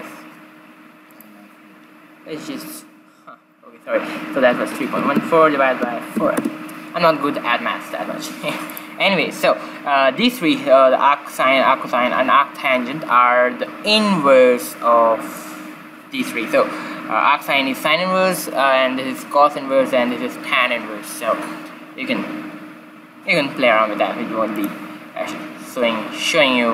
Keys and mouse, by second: 1.0-2.9 drag, 8.6-10.7 drag, 9.3 typing, 19.7 typing, 24.5 typing, 25.7-26.7 drag.